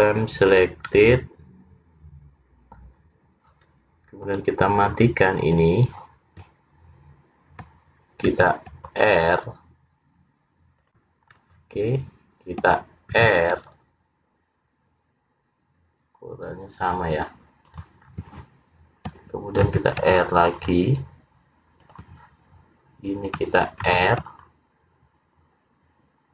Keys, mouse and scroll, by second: 0.5-1.0 scroll down 2, 1.0 middle click, 4.3 click, 5.5 click, 8.3 ctrl+r, 11.3-12.6 scroll down 1, 12.6-13.2 scroll down 1, 13.2 ctrl+r, 18.2 scroll down 3, 19.7 ctrl+r, 24.0 ctrl+r.